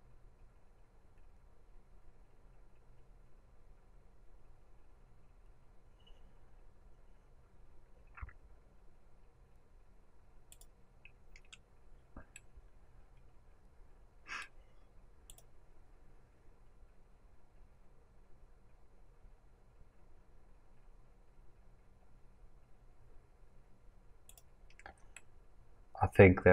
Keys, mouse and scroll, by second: 10.7-12.3 drag, 12.3-15.3 middle drag, 15.3-25.0 drag, 25.0 scroll down 2, 25.1-26.5 middle drag.